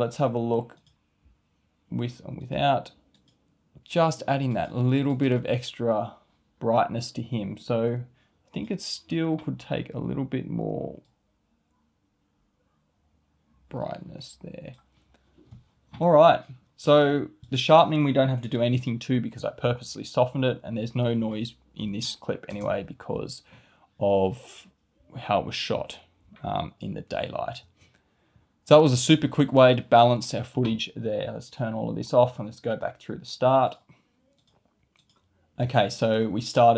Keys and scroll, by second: 22.4 space, 27.6 space.